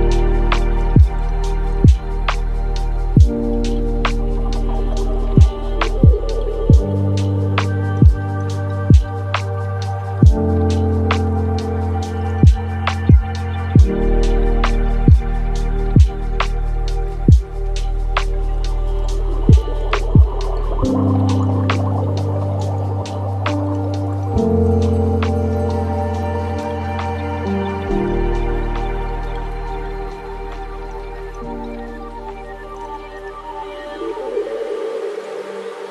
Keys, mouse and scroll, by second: 0.1 space, 1.4 click, 2.0 click, 2.6-6.2 middle drag, 6.2 click, 6.7 click, 7.2 scroll down 2, 7.6-10.7 middle drag, 12.6-18.3 middle drag, 19.7-22.1 middle drag, 22.1 drag, 26.0-31.4 drag, 31.4-33.2 middle drag, 33.2 space, 34.1 space, 35.3-35.9 shift+drag.